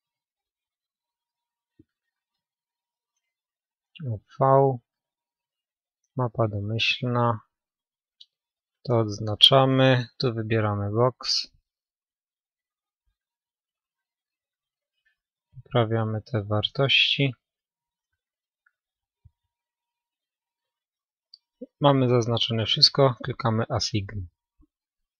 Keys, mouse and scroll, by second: 15.1-16.7 middle drag, 20.5-22.4 middle drag, 22.4-23.8 drag, 23.2 middle click, 24.1 click, 24.5 a.